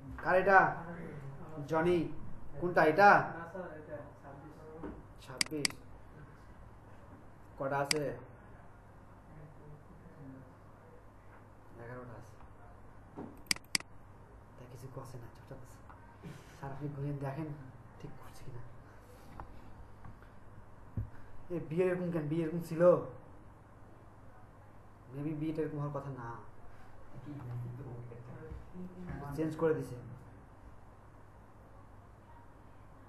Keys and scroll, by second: 29.2 Right.